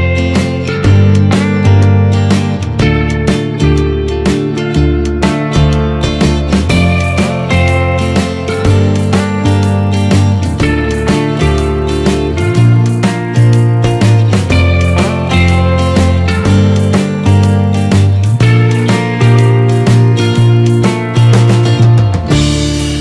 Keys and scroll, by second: 10.4 ctrl+-, 17.2 ctrl+z, 18.3 ctrl+0.